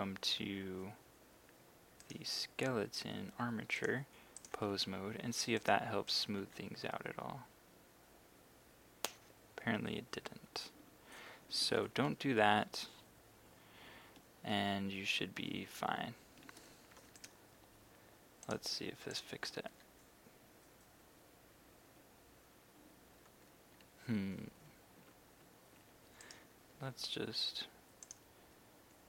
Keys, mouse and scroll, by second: 2.0 right click, 3.8 click, 5.6 right click, 10.7 Escape, 11.8 ctrl+z, 12.1 ctrl+z, 13.5 z, 13.8 z, 14.6 z, 15.4 z, 17.2-18.3 right drag, 18.5 click, 19.7 r, 22.9 Escape, 25.4 z, 26.3 right click, 28.1 click.